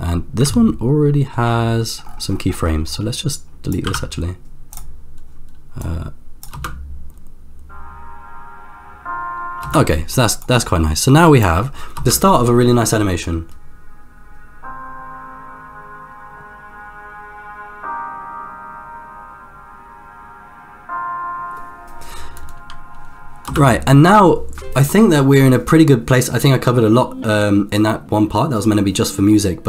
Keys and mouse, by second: 0.6 ctrl+middle click, 2.6 middle click, 3.1-5.0 drag, 3.9 x, 5.8-7.3 drag, 7.3 space, 9.7 space, 10.4-11.7 drag, 11.9 space, 23.5 space.